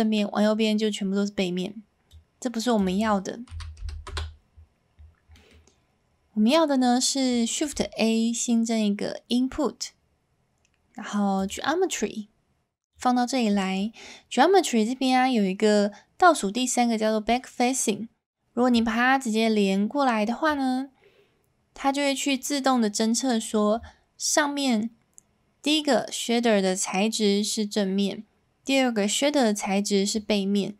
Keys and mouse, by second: 4.9 middle click, 5.3-7.3 middle drag, 7.3 s.